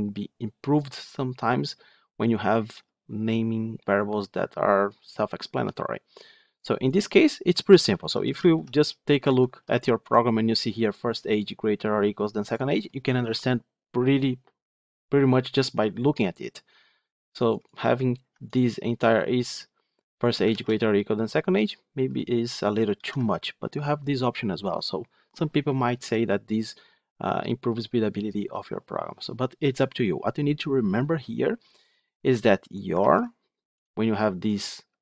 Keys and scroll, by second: 7.8 ctrl+z, 9.1 ctrl+z, 20.4 ctrl+c, 22.8 ctrl+v, 32.9 ctrl+z.